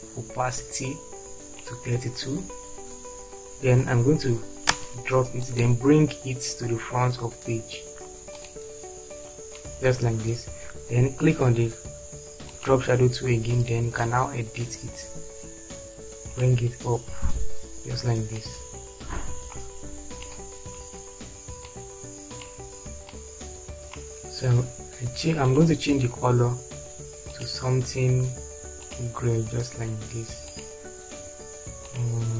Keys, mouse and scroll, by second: 4.9 space.